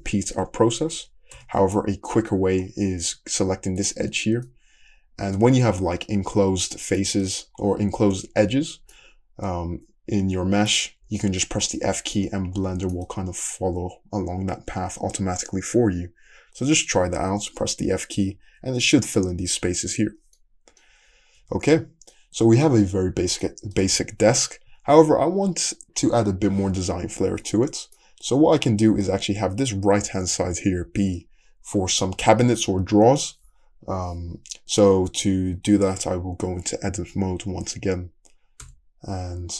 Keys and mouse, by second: 0.3 f, 1.1 ctrl+click, 1.4 ctrl+z, 3.8 click, 4.2-39.5 middle drag, 11.9 f, 12.6 f, 21.4 `, 23.0 Tab, 24.7 `, 38.7 Tab.